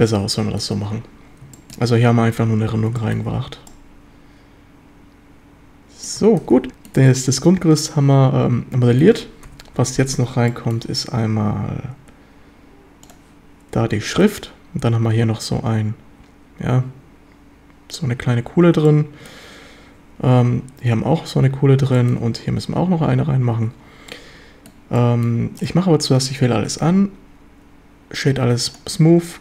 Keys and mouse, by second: 0.1-0.6 middle drag, 1.6 shift+middle drag, 3.0 shift+middle drag, 3.3 Tab, 3.7-6.1 middle drag, 6.5 s, 6.7 middle click, 7.1-9.0 middle drag, 9.5 KP_7, 9.8 z, 10.5 shift+middle drag, 14.1 shift+middle drag, 18.9-19.3 shift+drag, 22.0 shift+drag, 23.6 z, 24.1-24.7 drag, 25.0 click, 25.0 middle drag, 25.2 click, 25.6 right click, 26.7 q.